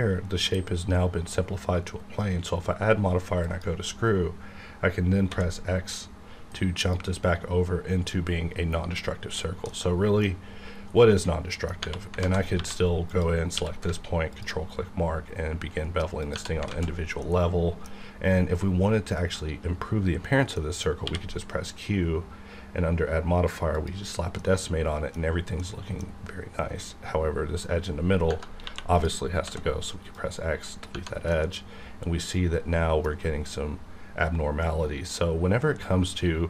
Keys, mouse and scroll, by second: 3.6 click, 5.2 x, 6.8 click, 9.7-11.8 middle drag, 12.2 alt+z, 12.5 1, 13.1 click, 13.5 q, 14.3 ctrl+click, 14.9 scroll down 1, 16.2 click, 16.7 alt+z, 17.2-20.3 middle drag, 20.8 middle click, 21.0 q, 23.7 click, 24.4-28.3 middle drag, 28.6 2, 28.9 click, 29.4 x, 30.1 click, 31.3-35.4 middle drag.